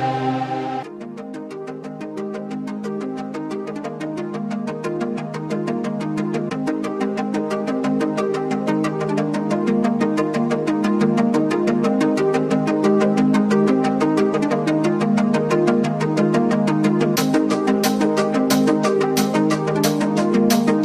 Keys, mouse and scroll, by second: 1.2 right click, 1.9-4.7 drag, 4.7-5.1 scroll up 1, 5.1 click, 5.6 alt+scroll down 1, 6.0 click, 8.2 click, 11.1 click, 13.3-13.8 scroll up 1, 13.8 click, 14.8 typing, 15.0 click, 15.6-16.8 scroll down 1, 16.8-18.3 scroll up 1, 18.9 click.